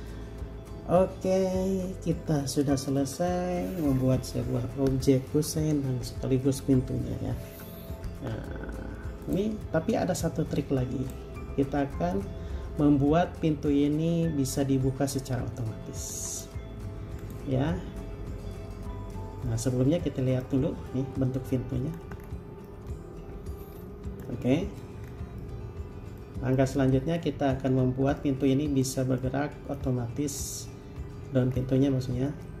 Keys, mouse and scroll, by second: 19.7 middle click, 22.4-22.8 scroll down 1, 22.8 scroll up 1, 22.9 middle click, 25.2-25.6 scroll down 1, 25.6 middle click, 27.7 scroll up 1, 28.4 middle click, 31.7 scroll down 1, 32.2-32.6 scroll up 1.